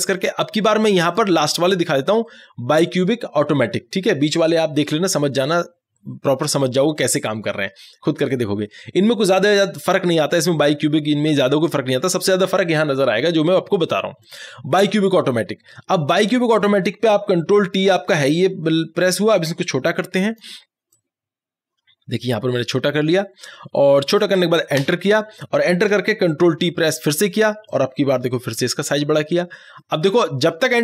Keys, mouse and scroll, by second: 0.0 ctrl+t, 1.1 click, 14.3 click, 19.4-24.8 drag, 24.8 Return, 27.7-30.8 drag.